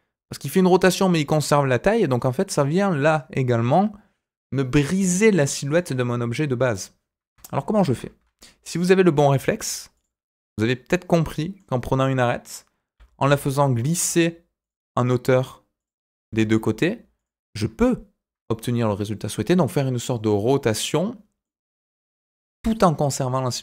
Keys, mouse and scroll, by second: 1.9-5.7 middle drag, 7.7 ctrl+z, 9.9 click, 11.2 middle click, 12.9 g, 14.9 middle click, 15.7 click, 16.2 g, 17.5-19.4 middle drag, 21.4 middle click.